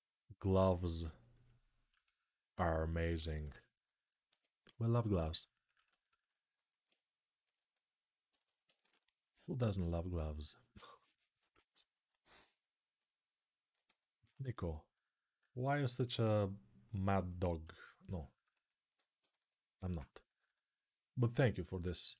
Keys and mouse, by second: 3.2 s, 4.0 x, 6.3-11.4 right drag, 8.5 1, 11.4-16.7 alt+drag, 21.8-22.1 ctrl+alt+drag.